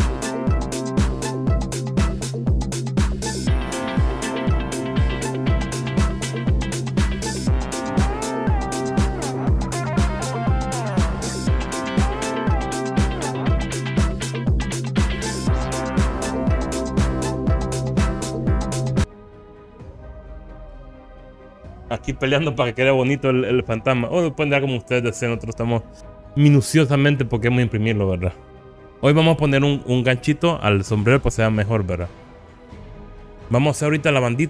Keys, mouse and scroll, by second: 1.3 r, 2.1 click, 2.1 g, 2.8 click, 3.3 click, 3.8 click, 4.3 ctrl+click, 5.0 shift+click, 5.4 r, 5.7 click, 5.8 g, 6.3 click, 7.0 shift+click, 7.3 shift+click, 7.6 ctrl+click, 7.9 g, 8.6 click, 8.7 Tab, 8.7 click, 8.8 click, 8.9 scroll down 1, 9.1 middle click, 9.8 KP_1, 10.0 click, 10.2 Tab, 10.4 scroll up 2, 11.2 alt+click, 11.3 r, 12.3 g, 12.5 click, 13.1 alt+click, 13.2 r, 14.4 click, 14.6 g, 15.4 s, 16.3 click, 16.5 click, 16.7 shift+middle click, 17.0 alt+click, 17.2 s, 18.0 click, 18.1-18.4 scroll up 2, 18.7 alt+click, 18.8 s, 19.0 Tab, 24.0 alt+z, 32.2 scroll up 2.